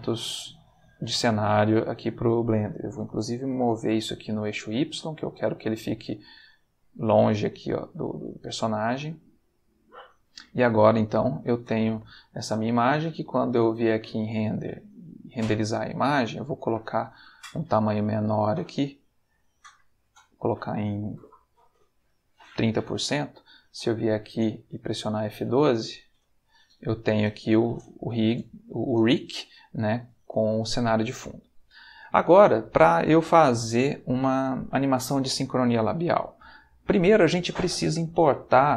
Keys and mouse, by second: 2.9 g, 3.9 y, 4.6 click, 5.1-8.3 middle drag, 9.0 click, 11.2 ctrl+middle click, 14.0 click, 18.4 click, 19.1 click, 20.2 click, 21.7 3, 22.2 0, 24.1 click, 25.3 click, 26.4 click, 31.4 click.